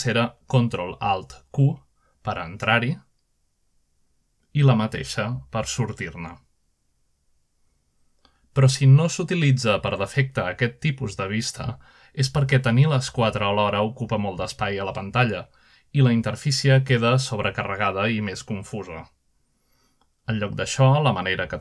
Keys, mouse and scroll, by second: 1.5 ctrl+alt+q, 2.9 scroll down 1, 3.2 scroll up 1, 3.9 scroll down 1, 4.1 scroll up 1, 4.6-5.9 middle drag, 5.4 scroll down 1, 5.8-6.4 scroll up 2, 6.6-7.7 shift+middle drag, 8.1 ctrl+alt+q, 9.1-9.8 shift+middle drag, 11.5-12.5 middle drag, 14.3 ctrl+alt+q, 15.5-15.9 scroll down 1, 16.1 scroll up 1, 16.5-17.3 shift+middle drag, 17.0-17.7 shift+scroll up 1, 18.0-18.8 middle drag, 18.0 scroll down 2, 18.3-18.8 scroll up 4, 19.4 middle click, 19.4 scroll down 2, 19.5-20.1 scroll up 2, 20.3-21.6 shift+middle drag.